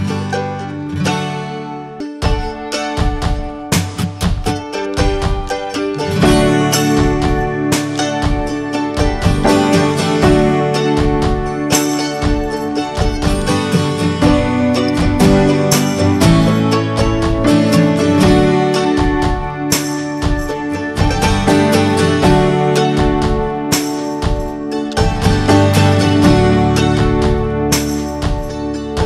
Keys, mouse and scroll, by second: 0.6 scroll up 4, 1.0-2.5 shift+middle drag, 2.5 scroll up 2, 3.2-4.3 shift+middle drag, 4.3 f, 6.7-7.3 drag, 7.3 ctrl+z, 9.2 ctrl+click, 9.7 scroll down 2, 10.2 ctrl+z, 10.3 scroll up 1, 11.6-13.3 right drag, 13.3-15.9 drag, 15.9 f, 17.0-18.9 drag, 19.4 middle click, 19.8 ctrl+z, 21.2 alt+middle click, 22.7 f, 24.3 click, 24.7 scroll down 1, 25.3 ctrl+z, 27.7 scroll up 2.